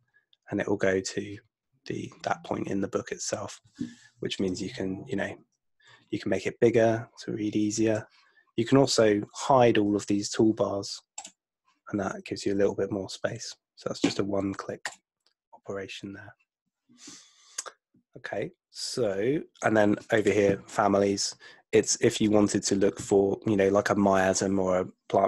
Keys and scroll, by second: 5.5 super+F2.